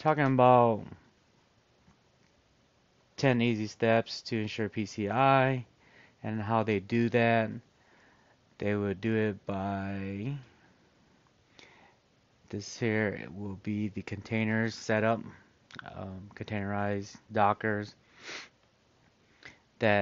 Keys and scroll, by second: 8.6 scroll.